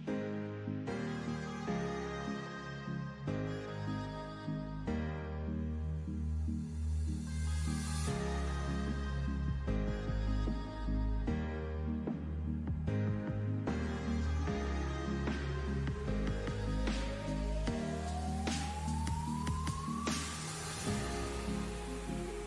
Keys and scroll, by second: 13.8 super+d.